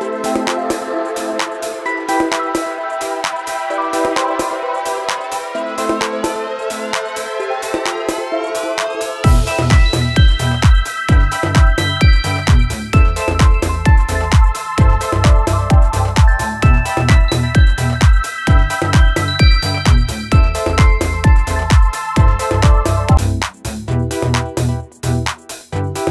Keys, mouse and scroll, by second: 5.8 click, 14.2 click, 22.5 alt+Num_Lock, 22.6 scroll up 2, 23.4-24.1 alt+scroll up 2, 24.5 scroll down 1.